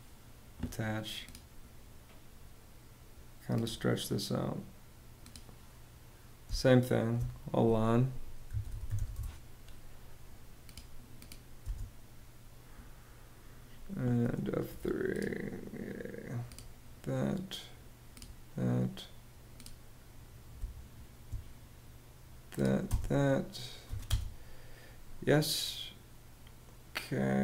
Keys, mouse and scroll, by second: 6.0 space, 7.7-9.0 typing, 11.1 space, 20.1 space, 22.4 space, 23.4 y, 23.6 space, 24.3 space.